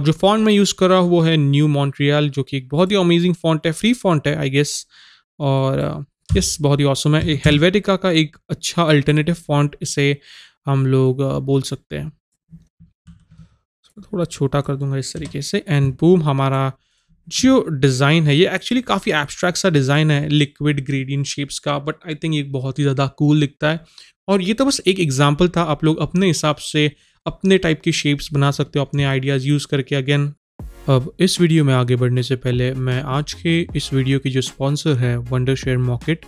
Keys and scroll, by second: 7.3 KP_0.